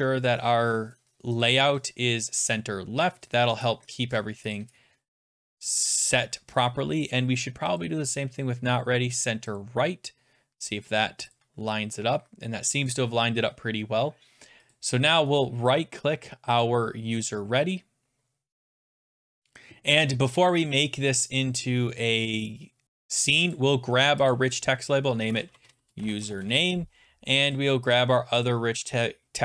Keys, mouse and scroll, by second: 1.5 click, 2.5 click, 4.6 click, 7.8 click, 9.6 click, 11.3 click, 14.7 click, 15.4 middle click, 16.6 click, 19.2 click, 20.4 scroll, 24.3 click, 25.0-26.7 typing, 27.6 click, 27.9 click, 28.5 click.